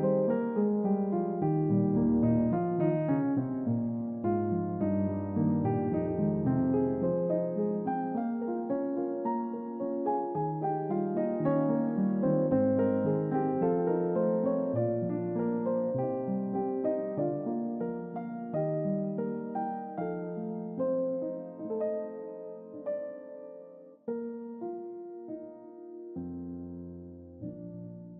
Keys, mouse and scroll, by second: 0.6 click, 1.6 click, 2.3 click, 2.7 shift+a, 4.9 click, 5.6 click, 6.2 click, 7.4 click, 8.8 click, 10.8 click, 11.7 middle click, 11.7 scroll down 2, 12.2 scroll down 2, 13.1-13.4 scroll down 2, 14.9 click, 15.7-16.0 scroll down 2, 16.2-17.4 scroll up 5, 19.6 click, 23.3 click, 24.7-26.0 middle drag.